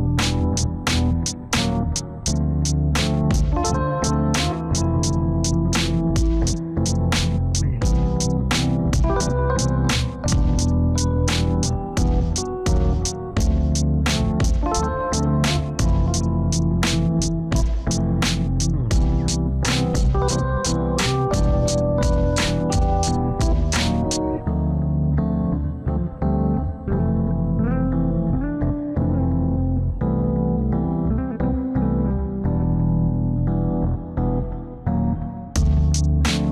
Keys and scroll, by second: 26.3 ctrl+z, 31.4 F4.